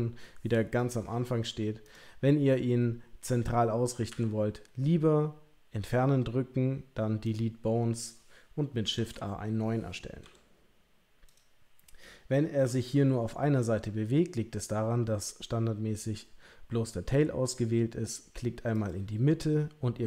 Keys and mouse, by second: 1.8 click, 4.1 Delete, 8.9 shift+a, 10.2 g, 12.6 g, 18.7 click.